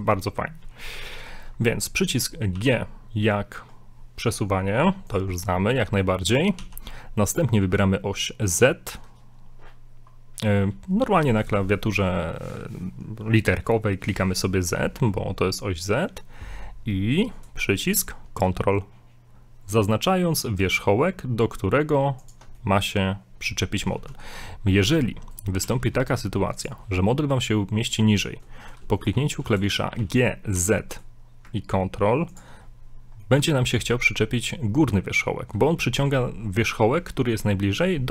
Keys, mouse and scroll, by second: 2.5 g, 5.3 scroll down 3, 5.5 middle click, 6.7 g, 22.6 middle click, 23.9 scroll down 2, 24.1 middle click, 24.3 scroll up 2, 24.8 b, 25.6 g, 30.0 g, 32.6 scroll up 3, 33.3 middle click, 36.2 scroll down 1.